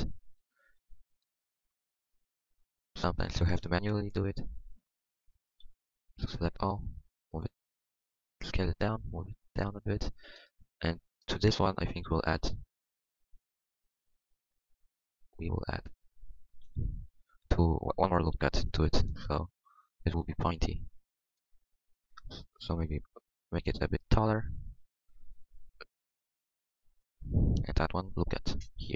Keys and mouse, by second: 5.6 KP_1, 6.5 KP_1, 7.7 s, 8.4 click, 16.6 g, 18.3 KP_1, 19.7 middle click, 21.2-23.0 middle drag, 24.1 middle click, 25.6 r, 27.2 click, 28.2 ctrl+r.